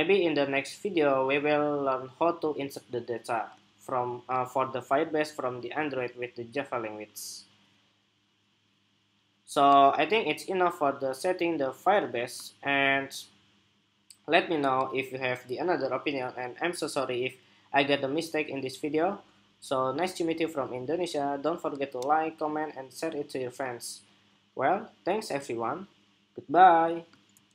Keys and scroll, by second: 27.3 shift+super+2.